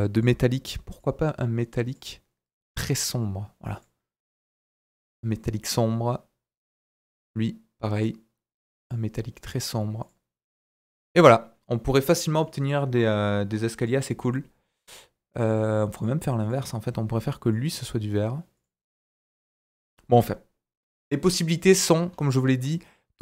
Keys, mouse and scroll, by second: 0.1-13.9 drag, 4.1 scroll down 1, 4.6 middle click, 6.6-10.3 middle drag, 6.6-10.3 right drag, 10.4 scroll down 2, 12.4 middle click, 14.7-20.3 drag, 20.3 middle click, 21.0 middle click, 21.9 right drag, 22.1-22.6 scroll up 2, 22.8-23.1 scroll up 1.